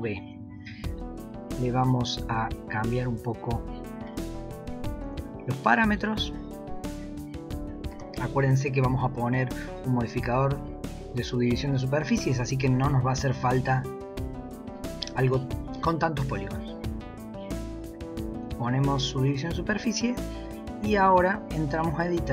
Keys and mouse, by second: 1.2 click, 2.4-3.6 drag, 4.1-5.5 drag, 6.0-8.2 drag, 11.7 g, 16.4-18.5 drag, 20.7 Tab, 21.6 s.